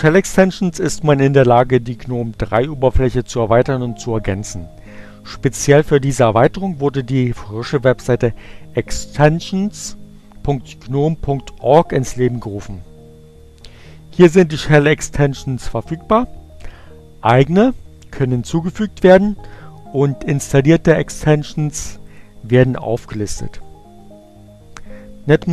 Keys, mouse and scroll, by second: 20.4-22.2 drag.